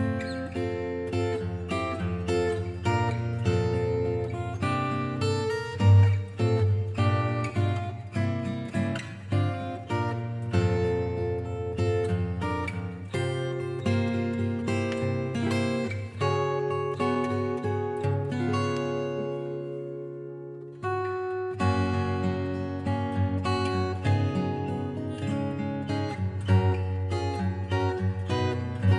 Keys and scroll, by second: 23.2-24.6 scroll down 1, 24.6-27.6 scroll up 1.